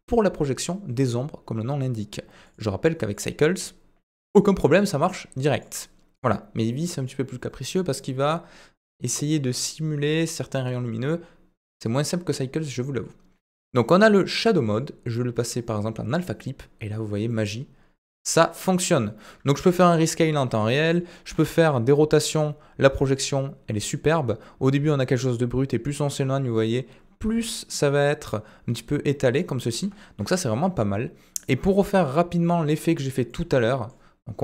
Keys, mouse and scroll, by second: 2.6-3.2 drag, 5.5-6.3 drag, 14.6-16.1 drag, 17.3-19.0 middle drag, 21.3 r, 29.8 ctrl+z, 31.7 g, 33.3-33.9 middle drag.